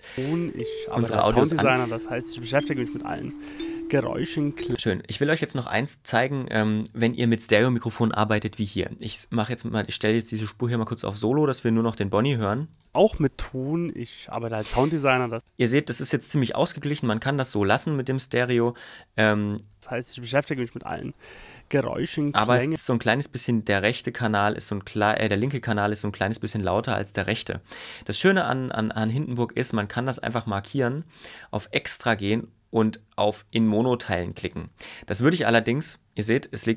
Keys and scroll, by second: 0.1 space, 4.7 space, 12.8 space, 15.3 space, 19.7 space, 22.7 space, 28.3 ↻.